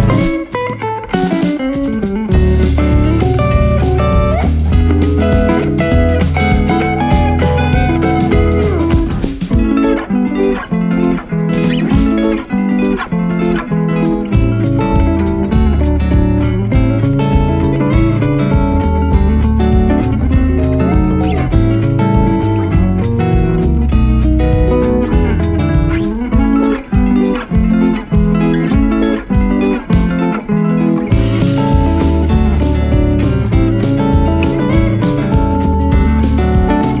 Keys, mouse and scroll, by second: 0.7 click, 3.6-4.7 drag, 5.2-7.8 drag, 8.9-10.2 scroll down 4, 10.5-14.9 drag, 15.4 click, 17.7 click, 19.2 click, 21.2 click, 22.1 click, 23.4 click, 23.6 scroll down 7, 23.7 click, 24.0 click, 24.6 s, 24.7 scroll up 4, 24.7 click, 24.8 KP_0, 25.0 click, 25.2 scroll down 2, 25.5 click, 25.5 right click, 26.7-30.2 typing, 27.0 click, 27.2 click, 27.5 scroll up 1, 27.6-28.0 scroll down 6, 27.7 click, 27.9 right click, 27.9 scroll up 1, 28.0 click, 28.1 shift+click, 28.2 scroll down 2, 28.2 right click, 28.2 scroll up 1, 28.3 scroll down 1, 28.4-28.8 scroll down 4, 28.7 click, 28.8 click, 29.4 ctrl+z, 29.5 shift+click, 29.5 scroll down 3, 29.8 click, 30.0 scroll up 2, 30.1 right click, 30.5 click, 30.6 click, 30.6 scroll down 5, 30.7 click, 31.6-32.0 scroll up 5, 32.0 click, 32.2 scroll up 2, 32.8-33.1 scroll up 2, 33.1 scroll down 4, 33.2 click, 34.0 click, 34.4-37.0 typing, 35.0 click, 35.2 scroll down 3, 35.3 click, 35.5 scroll up 2, 35.6 scroll down 3, 35.9 click, 35.9 scroll up 3, 36.5 click, 36.8 right click.